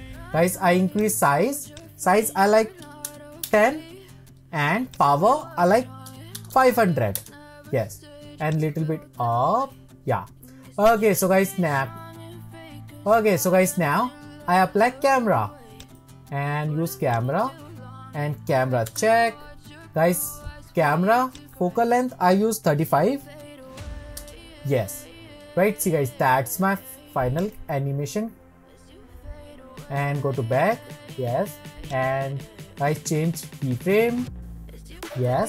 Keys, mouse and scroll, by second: 3.6-7.4 drag, 11.2-14.4 middle drag, 17.6-18.9 drag, 18.9 ctrl+alt+KP_0, 24.4 click, 34.5-35.4 drag.